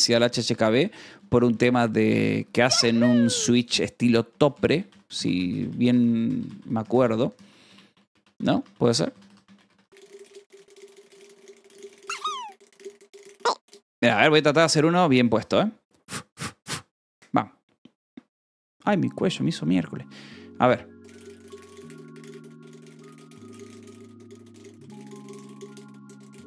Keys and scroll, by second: 3.6 g, 4.6 h, 5.1 e, 6.5 n, 9.6 space, 10.0 space, 14.2 t, 16.9 Tab, 16.9 d, 17.1 Return, 20.2 Delete, 21.0-22.0 typing.